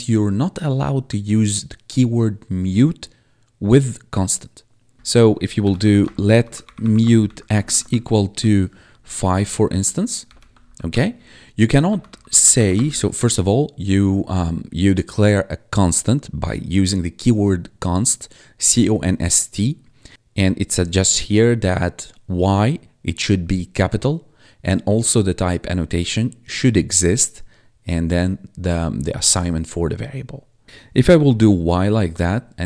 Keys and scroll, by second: 5.0-8.3 typing, 9.0 Right, 9.6 Left, 10.2 ;, 10.6 ctrl+s, 10.8 Return, 11.6-13.0 typing, 31.1-32.6 typing.